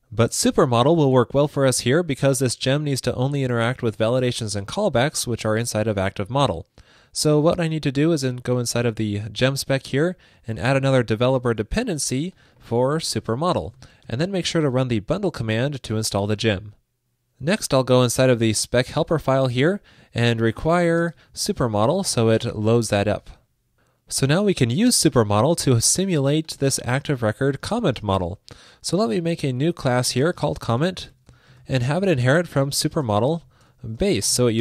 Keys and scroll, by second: 11.5 ctrl+shift+d, 14.1 super+s, 22.6 super+s.